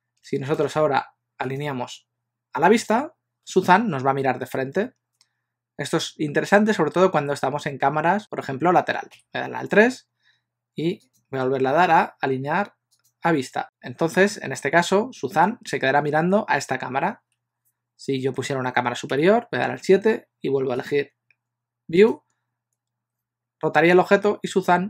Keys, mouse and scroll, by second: 1.8 click, 9.2 KP_3, 11.1 click, 19.1 KP_7, 21.0 click.